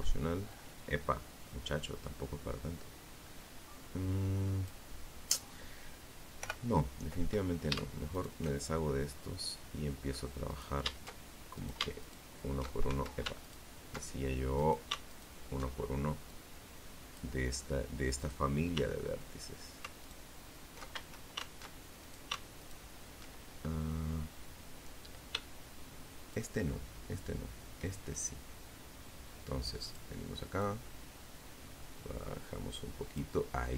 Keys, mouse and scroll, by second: 0.5 scroll down 2, 1.4-1.7 scroll up 2, 4.6 o, 6.3 alt+shift+right click, 8.6 right click, 9.7 alt+shift+right click, 10.2 alt+shift+right click, 11.0 alt+shift+a, 11.6 alt+shift+right click, 12.7 right click, 13.2 alt+shift+right click, 14.4 click, 16.4 right click, 18.2 alt+shift+right click, 19.1 alt+shift+a, 20.2 alt+shift+right click, 20.8 alt+shift+right click, 24.4 shift+right click, 26.3-28.3 shift+drag, 28.8-31.5 drag, 32.7 right click, 33.2 shift+right click.